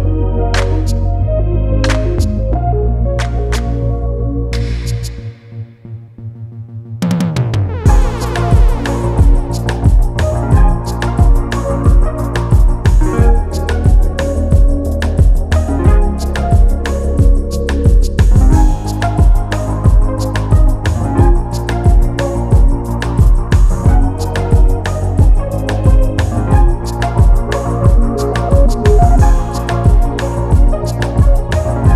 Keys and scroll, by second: 11.9 e, 15.0-16.9 typing.